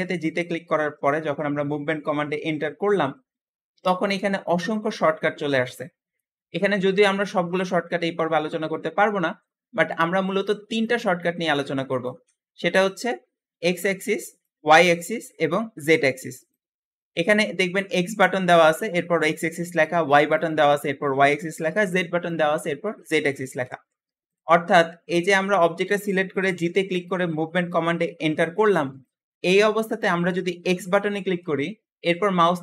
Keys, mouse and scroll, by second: 24.7-25.2 scroll down 2, 25.2-26.4 scroll up 1, 26.4 g.